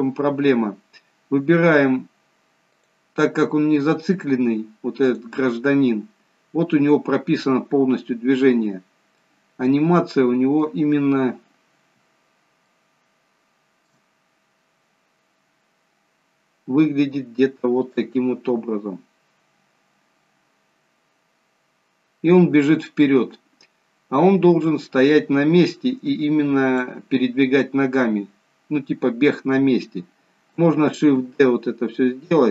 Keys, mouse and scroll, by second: 1.1-2.8 scroll down 1, 2.8 click, 5.1 click, 8.8 scroll up 2, 9.3 middle click, 11.1-11.8 scroll down 3, 12.8 shift+middle click, 14.3 scroll up 1, 15.2-15.8 scroll down 1, 16.1-17.0 scroll down 1, 18.2 click, 31.3 shift+d.